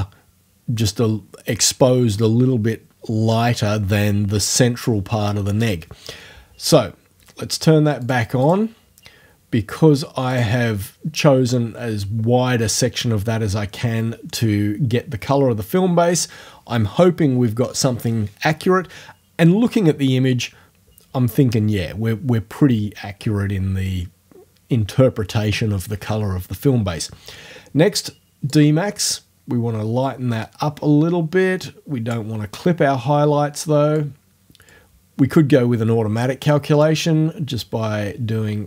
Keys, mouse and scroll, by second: 8.0 click, 8.5 click, 10.3 click, 28.5-32.3 drag, 34.0 click, 36.8-38.6 drag.